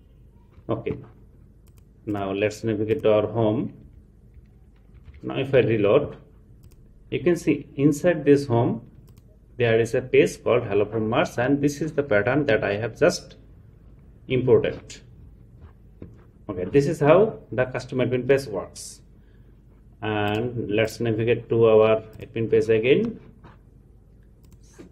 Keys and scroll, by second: 4.9 super+r.